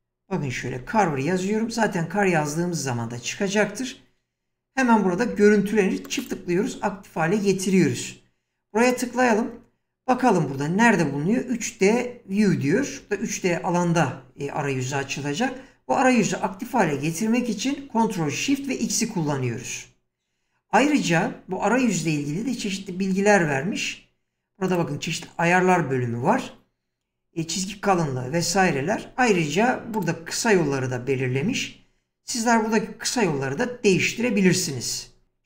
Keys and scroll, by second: 0.0-1.0 typing.